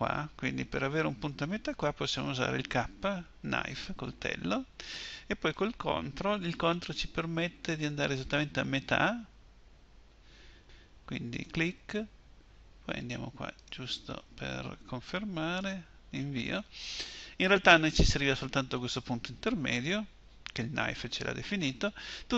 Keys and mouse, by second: 3.7 k.